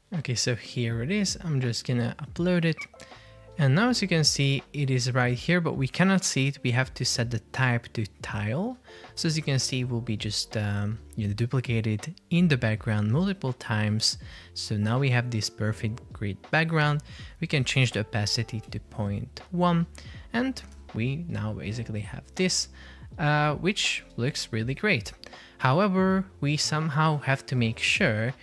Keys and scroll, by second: 9.9 shift+super+4, 18.8 Return, 24.5 Escape.